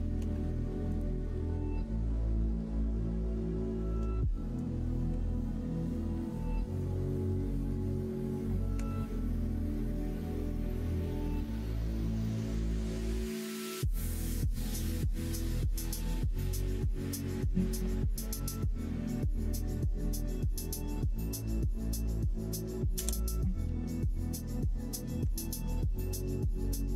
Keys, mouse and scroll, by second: 0.9-3.6 ctrl+drag, 4.2 shift+middle click, 6.3 middle click, 11.3 1, 13.2 shift+click, 17.1 s, 24.2 middle click, 24.8 middle click.